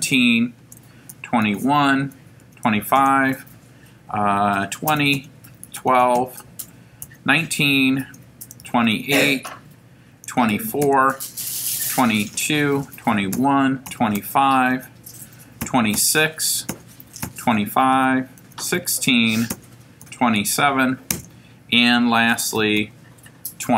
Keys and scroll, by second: 0.6 Return, 1.1-3.2 typing, 2.0 Return, 4.4-5.9 typing, 6.2 Return, 7.1 1, 7.5 9, 8.1 Return, 8.6 2, 8.9 8, 9.4 Return, 10.0-14.2 typing, 12.4 Return, 14.7 Return, 15.7 2, 16.0 6, 16.7 Return, 17.0-18.8 typing, 19.5 Return, 20.0 2, 20.4 7, 21.1 Return, 22.8 2.